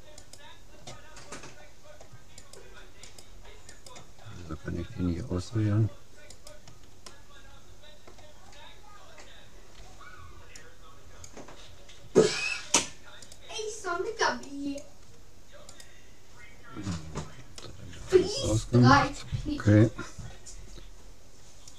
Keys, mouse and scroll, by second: 1.2-2.4 middle drag, 2.4-5.6 right drag, 4.2-5.2 middle drag, 5.2 click, 5.3-6.6 middle drag, 6.4-8.0 right drag, 7.2-8.5 middle drag, 9.8 b, 13.4-16.2 drag, 14.4 right click, 15.8-17.5 right drag, 17.9 middle click, 18.1-19.2 middle drag.